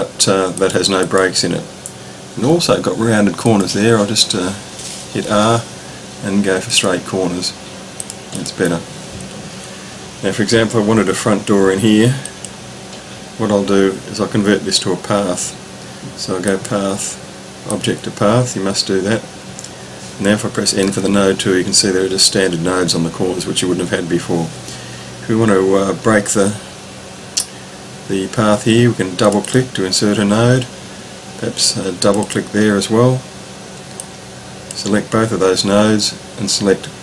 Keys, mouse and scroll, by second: 0.6 click, 3.4 click, 5.3 r, 6.7 click, 8.5 click, 12.2 click, 16.5 click, 20.8 n, 29.2 click, 29.4 double click, 32.0 click, 32.2 double click, 34.0 click.